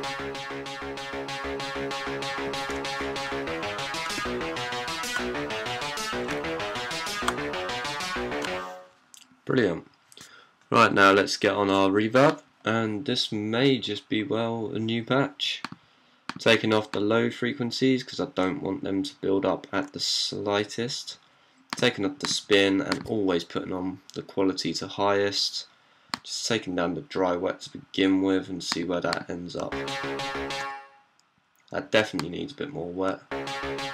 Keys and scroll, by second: 0.7 typing, 3.1-8.2 typing, 9.8-10.5 typing, 29.4-30.4 d, 32.9-33.9 typing.